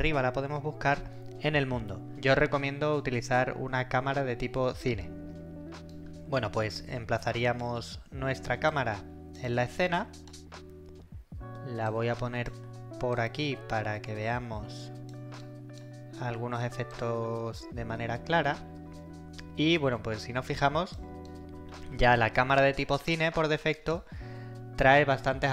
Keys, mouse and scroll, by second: 0.0-0.4 typing, 5.9 right click, 6.1-7.8 typing, 8.7-10.4 click, 9.4-10.5 typing, 9.4 right click, 11.9-12.5 click, 12.6 e, 13.2-15.4 drag, 15.4-16.0 right click, 16.0 w, 16.2 w, 16.9-19.7 drag, 21.1-24.1 typing, 21.2 right click.